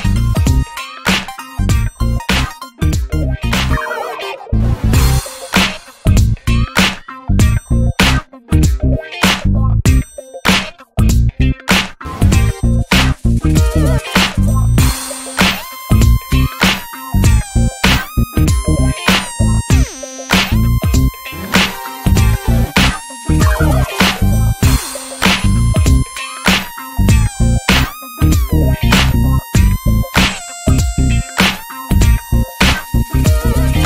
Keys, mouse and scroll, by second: 0.1 shift+middle click, 0.4 click, 0.8 click, 2.6 shift+middle click, 2.9 alt+z, 3.2 alt+z, 3.3-4.5 drag, 4.6 click, 5.0 click, 6.3 shift+middle click, 6.6 ctrl+s, 7.0 alt+z, 7.4 alt+z, 7.5 click, 8.2 ctrl+z, 9.5 alt+z, 9.8 Tab, 10.0-10.4 scroll down 10, 10.4 ctrl+s, 11.2 Tab, 11.3 alt+z, 11.4 scroll up 2, 11.6 shift+middle click, 12.0 ctrl+s, 12.4 click, 13.0 ctrl+s, 13.6 click, 15.0 ctrl+s, 15.4 click, 16.2 ctrl+s, 16.4-16.9 scroll up 4, 16.5 shift+middle click, 16.9 ctrl+s, 17.1 click, 19.9 shift+middle click, 20.3 e, 21.4 scroll down 4, 21.6 alt+z, 21.7 shift+middle click, 21.9 scroll up 1, 22.3 scroll down 3, 22.6 ctrl+s, 22.7 scroll up 3, 22.9 Tab, 23.2 alt+z, 23.3-23.9 scroll up 6, 23.5 shift+middle click, 23.9 ctrl+s, 24.1 ctrl+click, 24.7 click, 25.1 click, 27.2 shift+middle click, 27.5 click, 29.0 scroll down 1, 29.1 shift+middle click, 29.9 click, 30.7 shift+middle click, 31.1 click, 32.6 ctrl+z, 33.0-33.3 drag, 33.3 shift+middle click, 33.6 click.